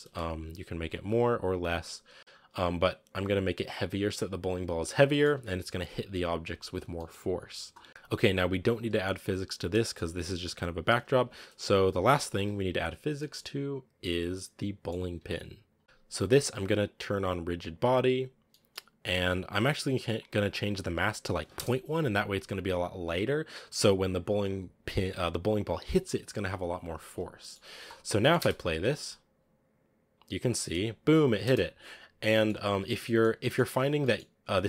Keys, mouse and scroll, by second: 0.0 space, 2.2-3.7 drag, 3.7 right click, 5.0 shift+middle drag, 5.2 a, 6.2-6.8 scroll down 1, 6.8 scroll down 1, 7.0-8.6 shift+middle drag, 8.6 right click, 9.8 shift+middle click, 10.6-11.0 scroll up 5, 11.0 a, 11.5 right click, 12.4 KP_Decimal, 12.9 scroll down 3, 13.1-15.1 middle drag, 15.1 a, 15.6 right click, 17.8 click, 18.5-21.4 middle drag, 21.4-26.8 drag, 26.8-28.1 scroll down 7, 27.4-27.7 middle drag, 28.1 middle click, 28.2 space, 29.2 scroll up 6, 31.3 space, 31.5 click, 32.2 middle click, 32.5-32.9 scroll up 4, 32.9 middle click, 33.5 scroll up 1, 33.7 right click, 33.9 middle click, 34.3 r.